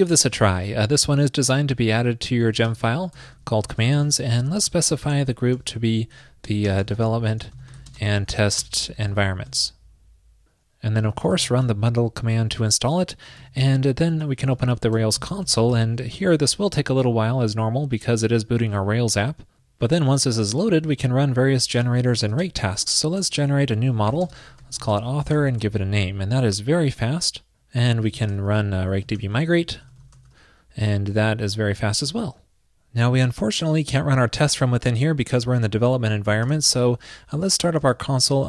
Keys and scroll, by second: 9.6 super+s, 13.4 super+k.